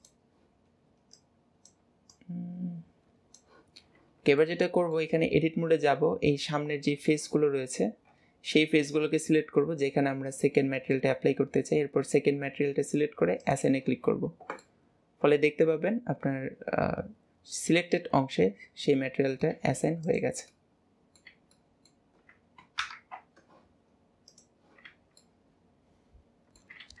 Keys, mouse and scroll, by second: 4.5-5.5 middle drag, 6.4-7.6 middle drag, 13.4 click, 14.7-19.0 middle drag, 19.6 middle click, 21.3 middle click, 22.1-24.9 middle drag, 25.2-27.0 middle drag.